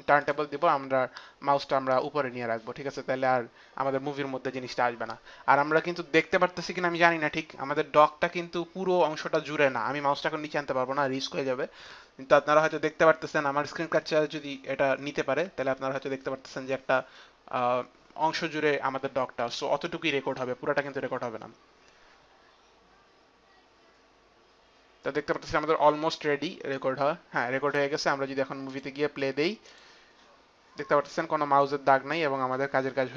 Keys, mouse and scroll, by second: 28.3 click, 29.3 click.